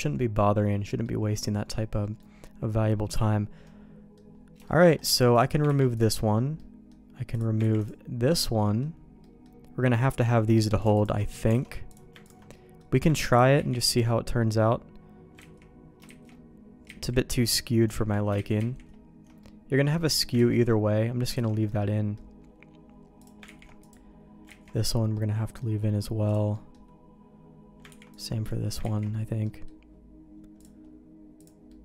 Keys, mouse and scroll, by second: 0.8 middle click, 2.0 middle click, 3.6 middle click, 4.6 shift+middle click, 5.3 click, 5.6 ctrl+e, 6.5 middle click, 7.3 click, 7.7 ctrl+e, 8.3 middle click, 9.2 middle click, 10.9 alt+click, 11.5 alt+a, 11.9 click, 12.5 middle click, 13.5 ctrl+e, 16.0 ctrl+z, 16.8 ctrl+z, 17.9 ctrl+z, 18.6 ctrl+shift+z, 19.4 middle click, 20.3 ctrl+z, 21.3 alt+a, 21.4 alt+middle click, 21.8 middle click, 23.2 click, 23.4 ctrl+e, 24.5 ctrl+z, 25.1 middle click, 26.2 click, 26.5 middle click, 27.9 ctrl+e, 28.8 ctrl+z, 29.4 middle click, 31.4 click, 31.7 middle click.